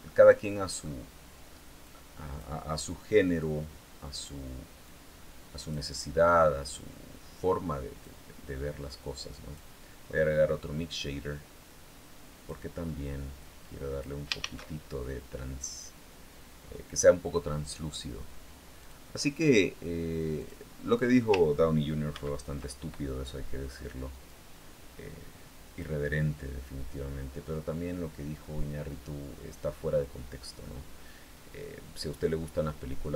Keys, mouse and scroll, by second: 1.6 click, 3.1 click, 4.6-5.7 drag, 6.5-8.0 drag, 8.7 click, 11.5-12.5 drag, 13.1 click, 14.1 shift+a, 18.5 click, 20.1 click, 21.9 ctrl+v, 24.1-25.7 drag, 26.7-27.5 scroll up 1, 27.5-28.2 scroll down 1.